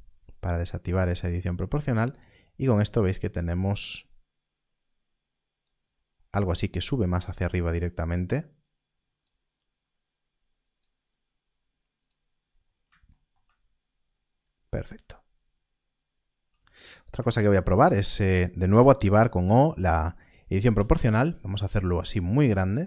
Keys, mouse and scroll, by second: 5.7 scroll down 1, 6.8 scroll up 1, 7.7 click, 12.2 scroll down 1, 16.9 click, 19.9 o, 20.7 g, 21.0-22.8 scroll down 1.